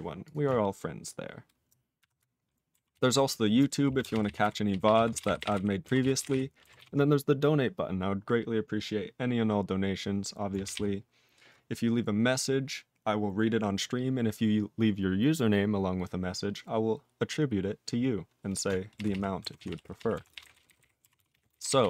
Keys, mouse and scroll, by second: 0.2 click, 0.3 click, 3.0 ctrl+s, 4.0 ctrl+space, 4.1 ctrl+p, 4.2 ctrl+e, 4.4 ctrl+g, 4.7 ctrl+p, 4.8 ctrl+p, 5.0 ctrl+a, 5.1 ctrl+space, 5.1 ctrl+e, 5.2 ctrl+End, 5.4 ctrl+g, 5.4 ctrl+e, 5.5 ctrl+n, 6.0 ctrl+s, 6.2 ctrl+n, 6.8 ctrl+s, 10.6 ctrl+n, 10.7 ctrl+e, 19.0 ctrl+p, 19.1 ctrl+p, 19.6 ctrl+s, 19.7 ctrl+p, 19.9 ctrl+p, 20.0 ctrl+p, 20.1 ctrl+a, 20.3 ctrl+e, 20.4 ctrl+g, 20.5 ctrl+n, 20.7 ctrl+n, 20.8 ctrl+n, 21.2 ctrl+s, 21.3 ctrl+a, 21.5 ctrl+e, 21.6 ctrl+n, 21.7 ctrl+n.